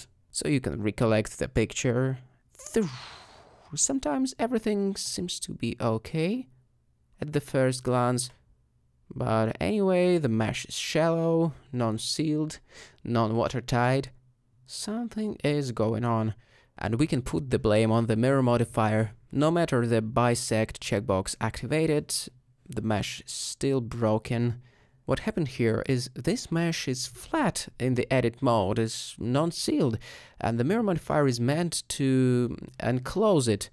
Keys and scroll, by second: 5.2 alt+shift+g, 5.3 alt+shift+z, 8.9 g, 13.9 shift+h, 26.0 Tab, 33.6 alt+Tab.